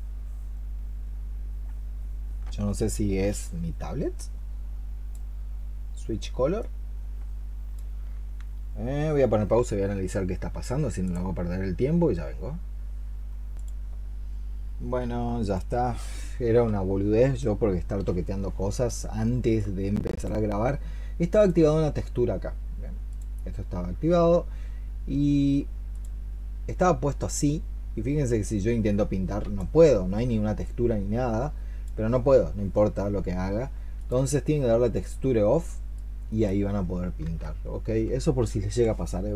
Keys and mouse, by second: 19.4 alt+click, 37.1 ctrl+z.